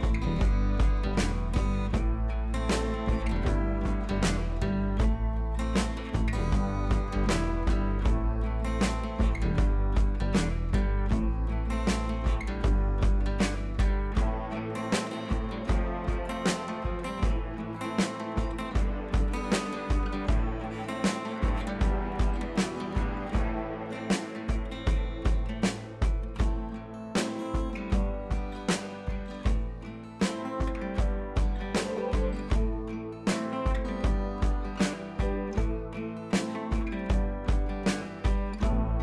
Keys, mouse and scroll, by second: 7.9-9.0 drag, 10.2-11.2 drag, 12.6 typing, 13.8-14.3 click, 17.6 click, 17.6 typing, 19.7-21.4 drag, 22.4-24.2 drag, 25.0-26.0 click, 26.6 Up, 29.7 click, 32.2 click, 33.6 i, 33.8 click, 34.9 ctrl+z, 35.7 click.